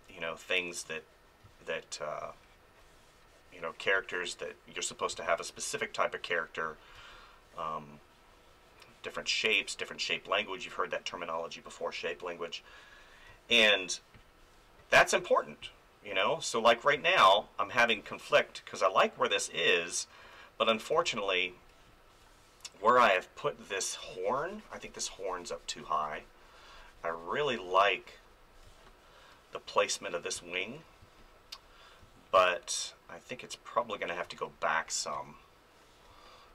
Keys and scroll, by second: 1.4 space, 5.1 space, 7.0 space, 13.3 space, 16.9 space, 20.2 ctrl+z, 20.9 space, 28.6 space, 30.3 space, 34.2-36.5 typing.